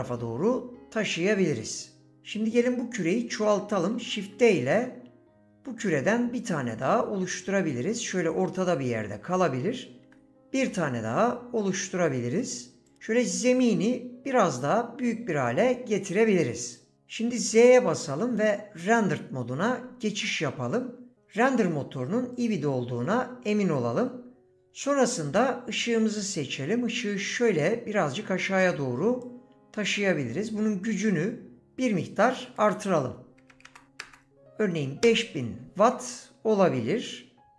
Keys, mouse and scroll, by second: 3.9 shift+d, 8.7 click, 10.1 shift+d, 13.5 s, 16.6 click, 17.6 z, 22.3 click, 25.9 click, 31.8-35.1 drag, 33.6 KP_0.